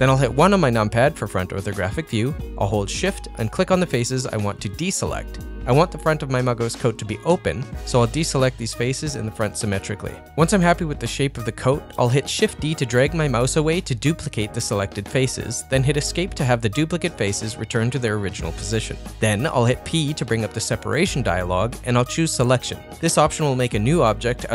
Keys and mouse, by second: 1.1 KP_1, 2.0 ctrl+middle click, 3.7 shift+click, 4.3 shift+click, 5.0 shift+click, 5.9 shift+click, 6.2-7.9 shift+drag, 8.0 shift+click, 8.8 ctrl+middle click, 8.9 middle click, 9.3 shift+click, 10.2 shift+click, 10.4 ctrl+middle click, 10.6 middle click, 12.0 shift+d, 17.2 middle click, 18.3 middle click, 20.1 p.